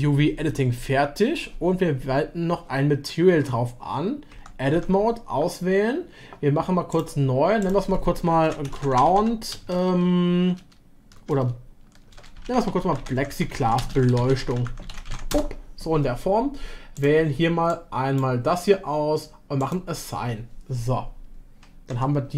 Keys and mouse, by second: 4.3 Tab, 4.7 Tab, 6.9 a, 6.9 drag, 7.6-15.9 drag, 13.6 s, 19.6-21.9 drag, 21.9 Tab.